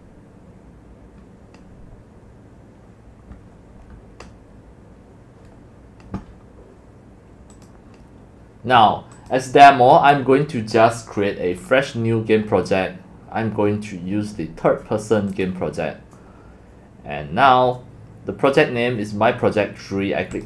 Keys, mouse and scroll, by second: 2.1-4.1 drag, 7.5 click, 9.1 click, 11.6 click, 20.3 click.